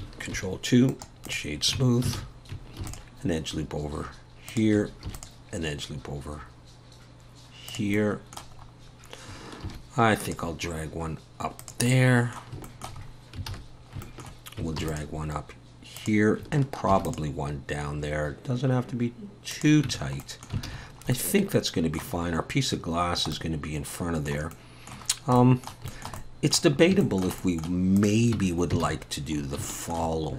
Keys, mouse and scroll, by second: 0.3 ctrl+2, 1.3 right click, 1.8 Tab, 2.2 alt+a, 2.8 ctrl+r, 5.1 ctrl+r, 8.0 middle click, 8.6-9.3 scroll up 1, 9.3-9.7 scroll up 1, 9.7 ctrl+r, 11.9 middle click, 12.6 shift+middle click, 13.0-13.5 scroll up 3, 13.5 alt+a, 13.8 scroll down 2, 14.0 shift+middle click, 14.8 ctrl+r, 16.9 ctrl+r, 19.9 Tab, 20.2 middle click, 20.7 alt+a, 20.8-21.3 scroll down 4, 21.1 middle click, 22.2-23.0 scroll up 1, 23.0 scroll up 2, 23.0 scroll down 2, 23.3 middle click, 24.5 middle click, 25.1 scroll down 2, 25.4 middle click, 25.9 shift+middle click, 26.0 shift+middle click, 26.2 middle click, 26.8 scroll up 1, 27.0 shift+middle click, 27.4 middle click, 28.1 click, 28.4 Tab, 28.8 alt+a, 29.4 scroll up 2, 29.7 shift+middle click.